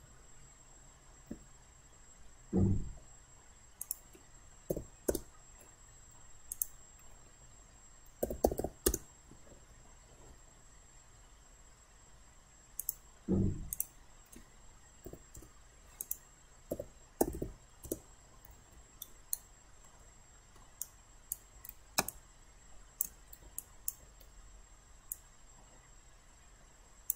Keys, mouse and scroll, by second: 3.8 click, 4.7 typing, 5.1 Return, 6.5 click, 8.0-9.1 typing, 12.8 click, 15.1 8, 15.4 Return, 16.0 click, 16.8-17.4 typing, 17.9 Return, 19.0 alt+right click, 19.9 alt+middle click, 20.8 alt+right click, 23.6 alt+click, 25.1-27.1 drag.